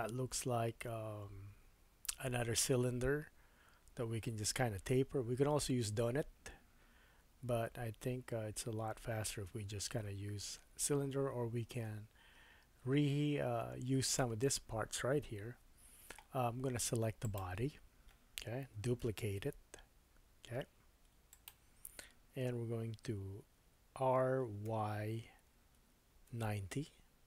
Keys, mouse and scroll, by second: 8.9-9.7 scroll up 2, 9.7-12.0 scroll down 1, 12.0 scroll down 1, 17.2 click, 19.0 shift+d, 23.9 r.